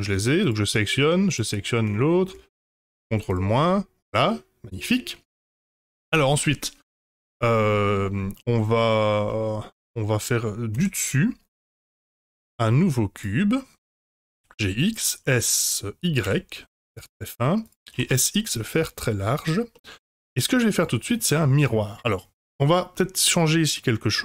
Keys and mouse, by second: 2.7 ctrl+KP_Subtract, 3.3 drag, 3.6-6.6 middle drag, 9.2-10.1 middle drag, 10.7 KP_7, 12.2 shift+a, 14.0 g, 15.2 s, 17.9 s, 19.7-20.3 middle drag, 20.7 click, 21.2 middle drag.